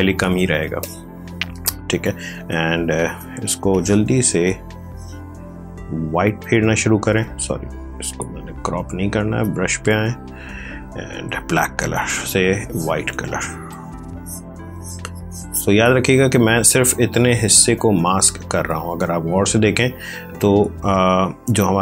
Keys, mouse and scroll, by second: 0.0-3.8 typing, 0.7 click, 1.8 click, 3.6 click, 4.7 click, 6.2 c, 8.0 Escape, 9.3 b, 11.2 x, 11.8 click.